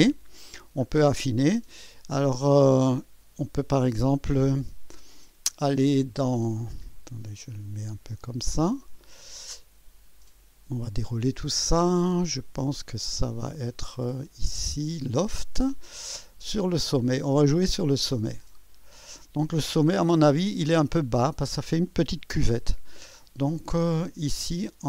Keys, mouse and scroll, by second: 0.8 scroll up 2, 5.6-6.3 drag, 6.8-8.9 drag, 10.2 click, 13.1 click, 14.2 click, 15.1 click, 15.9 scroll down 2, 16.5 click, 18.0 click, 18.6 click.